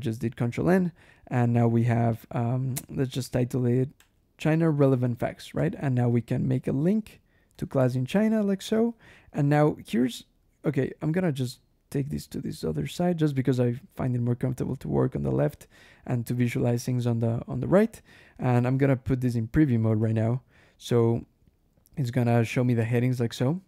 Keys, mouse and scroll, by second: 3.8 \, 4.5 click, 4.9 Escape, 5.4-9.4 typing, 7.4 Return, 7.7 Escape, 11.4-12.9 drag, 13.6-14.9 drag, 15.5 click, 16.6 click, 18.7 click, 19.8 ctrl+e, 20.9 scroll up 1, 21.1-21.9 scroll down 2, 23.4 scroll down 1.